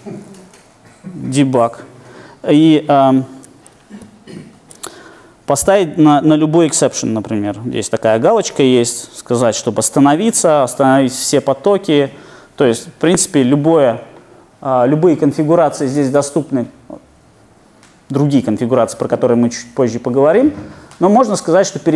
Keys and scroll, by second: 4.1 shift+super+F8.